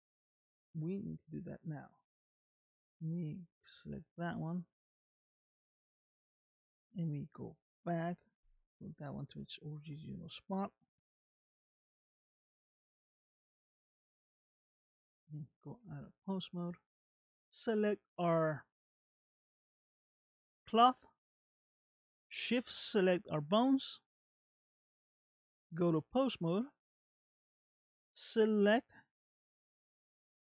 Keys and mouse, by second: 3.7 click, 4.8 ctrl+Tab, 6.8 click, 9.5 alt+r, 9.9 alt+g, 11.2 alt+s, 12.4 click, 13.5 middle click, 15.7 ctrl+Tab, 26.1 ctrl+Tab, 27.1 middle click.